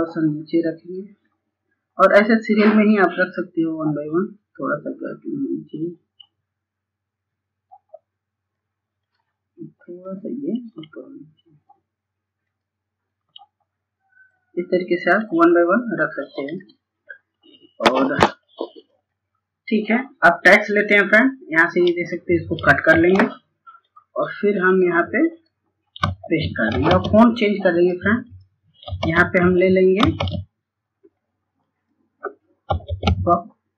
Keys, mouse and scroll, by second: 0.0 scroll up 1, 1.5 click, 3.0 scroll down 1, 3.5 scroll up 1, 6.3 click, 14.4-14.9 scroll down 1, 14.9 click, 22.6 click, 26.6 click, 30.5 click, 31.5 typing.